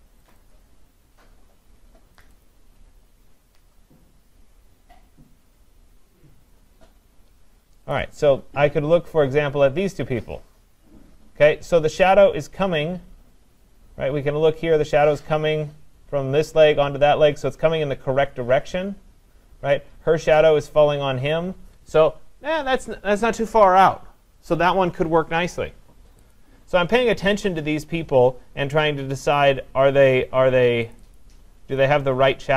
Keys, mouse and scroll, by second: 0.3 click, 0.5 click, 2.2 click, 2.4 click, 7.9 click, 8.2 click, 9.5-10.8 scroll, 10.8-11.7 scroll, 12.5-13.0 scroll down 5, 13.0 scroll down 1, 18.4-20.0 scroll down 1, 20.0-23.5 scroll down 1, 26.3 click, 30.9 click, 31.1 click, 32.3 scroll, 32.4-32.5 scroll down 4.